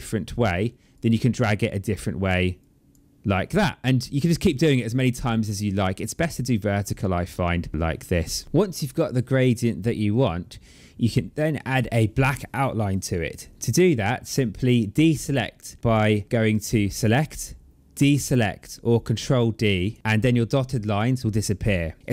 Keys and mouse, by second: 0.7 click, 2.4 click, 3.8 click, 16.8 click, 19.6 click.